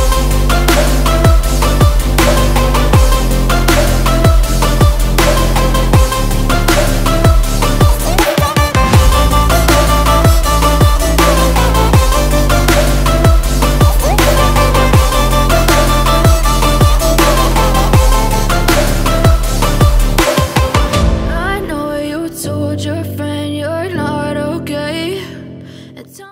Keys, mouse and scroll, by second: 0.7 click, 0.7-10.8 drag, 1.7 typing, 12.8-15.7 drag, 16.1 ctrl+space.